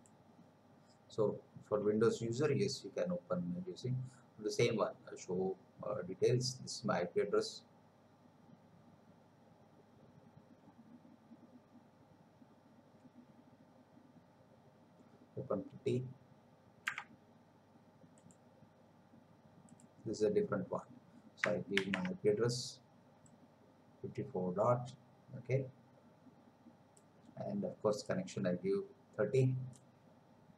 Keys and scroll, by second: 21.8 ctrl+v.